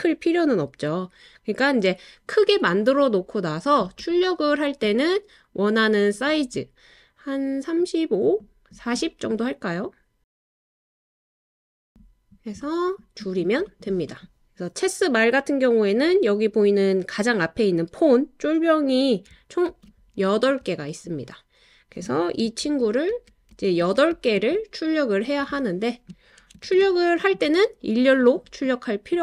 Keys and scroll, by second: 19.7 super+d, 22.6 super+d, 23.1 super+d, 23.5 super+d, 26.6 super+d.